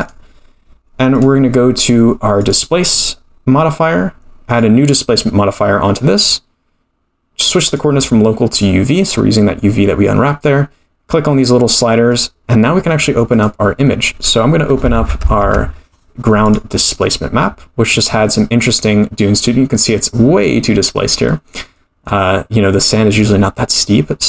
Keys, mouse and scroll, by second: 0.0 click, 1.1-4.2 drag, 4.5 click, 7.6-9.3 drag, 12.1 click, 13.3 click, 15.4 click, 20.2-20.9 scroll up 4, 21.2-22.0 middle drag, 23.1 click.